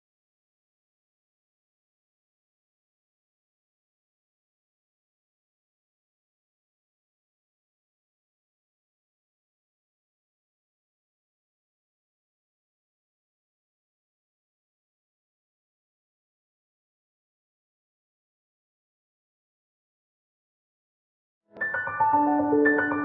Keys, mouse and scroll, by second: 0.2 click, 2.2-2.8 scroll down 1, 3.1 right click, 4.0 scroll up 1, 4.3 click, 5.1 right click, 7.5 right click, 8.1 click, 9.5 ctrl+j, 9.7 click, 9.9 right click, 10.3 click, 10.7-12.0 right drag, 12.0 click, 12.5 scroll up 1, 13.0 scroll down 1, 13.8 click, 14.0 scroll down 1, 14.7 right click, 15.7 scroll up 1, 17.5 scroll down 1, 18.5-19.8 right drag, 19.8 ctrl+F1, 20.0 ctrl+F2, 20.3 scroll down 1, 20.6 scroll up 1, 21.6-22.0 scroll up 1.